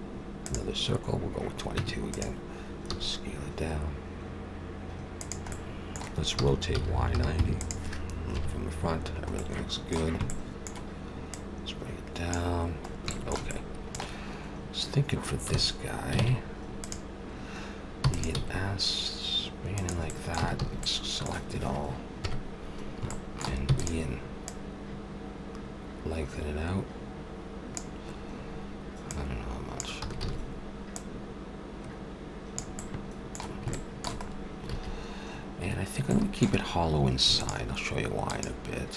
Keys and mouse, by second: 1.7 Tab, 2.9 s, 5.5-7.4 middle drag, 6.3 r, 8.3 KP_1, 11.3-13.0 drag, 13.0 middle click, 16.2 ctrl+Tab, 18.0 e, 18.3 s, 20.4 a, 20.6 a, 22.1 KP_1, 23.6 e, 24.4-26.4 drag, 29.0-32.9 drag, 30.0 a, 30.2 a, 34.7 a, 37.3-38.9 drag.